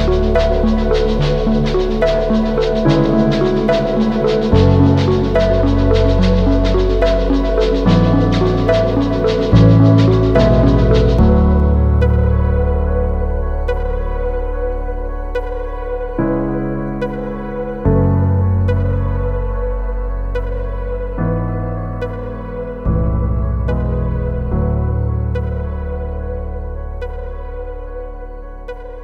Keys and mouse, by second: 0.0 ctrl+click, 0.6 click, 1.1 shift+click, 1.8 shift+drag, 2.8 shift+middle click, 2.9 shift+click, 3.1 drag, 4.2-7.9 drag, 8.3 shift+click, 8.4 a, 9.3 a, 10.2-13.7 drag, 14.5 Tab, 14.7 Tab, 15.2 2, 17.4 g, 18.8 shift+click, 19.0 Tab, 19.7 a, 20.0 ctrl+s, 20.5-21.2 shift+drag, 21.3-21.8 drag, 22.0 shift+drag, 22.8-24.2 drag, 25.2 Tab, 25.4 click, 26.4 3, 28.3 shift+drag.